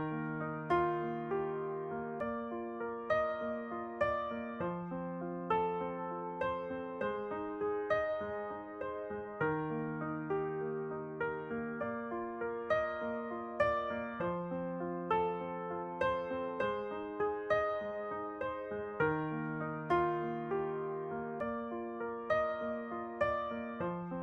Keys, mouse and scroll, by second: 0.5 ctrl+2, 1.0-4.7 middle drag, 4.7-5.8 drag, 5.5 middle click, 5.8-8.0 middle drag, 8.0 click, 10.8-15.2 drag, 16.4 a, 16.7-19.6 middle drag, 20.0 middle click, 24.0 right click.